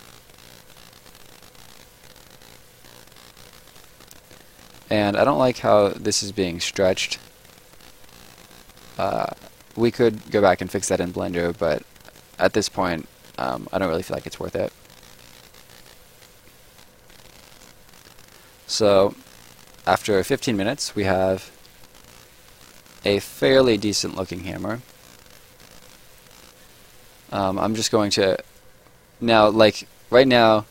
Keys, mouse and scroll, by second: 3.7 scroll up 1, 3.9 right click, 4.3-5.0 scroll up 2, 4.5 middle click, 5.0 right click, 12.8-13.1 scroll down 1, 13.1 right click, 13.7 scroll down 1, 13.9 right click, 14.5 scroll down 1, 14.7 right click, 17.0 click, 17.8 right click, 21.4 click, 21.8 right click, 28.5 click, 29.4 right click.